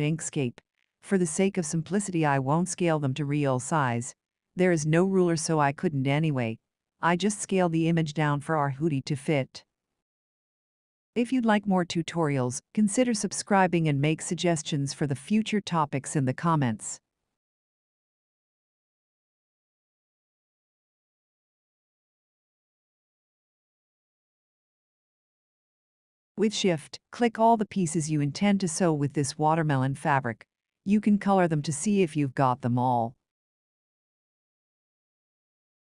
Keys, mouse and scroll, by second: 5.0 click, 7.6 ctrl+v, 9.4 ctrl+scroll, 11.8 ctrl+shift+click, 16.8 click, 25.1-25.4 scroll, 26.8-27.3 ctrl+scroll, 29.3 click, 31.1 shift+click, 35.4 shift+click.